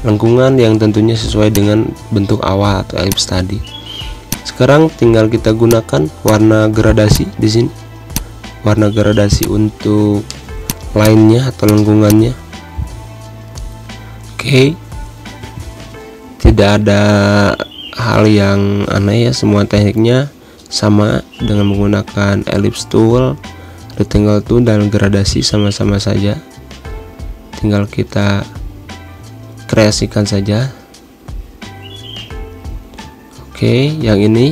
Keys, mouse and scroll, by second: 0.4 End, 1.2 Delete, 1.8-10.9 drag, 14.9-24.6 drag, 24.6 v, 24.9 click, 26.3 Down, 27.6 click, 29.2 Up, 30.4 click, 30.8 Pause, 31.3 click, 31.5 space, 31.7 click, 31.8 space, 32.1 click, 33.7-34.5 alt+drag.